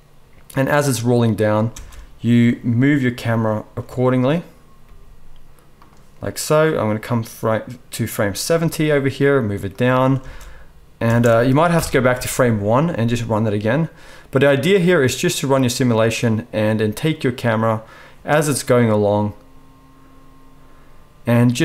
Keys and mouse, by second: 1.8 space, 4.8 g, 5.8-6.9 middle drag, 6.9-9.8 drag, 8.5 g, 9.8-21.6 middle drag, 10.1 space, 11.5 space, 11.7 shift+Left, 12.1 space.